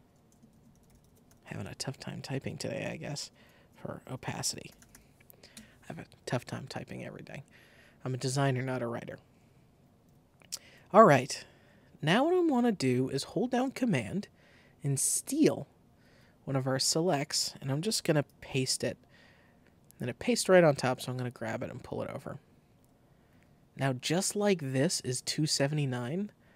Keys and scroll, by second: 0.0-1.5 typing, 0.1 super+t, 0.2 super+a, 3.2-5.3 typing, 5.6 Return, 15.9 super+c, 18.2 super+v.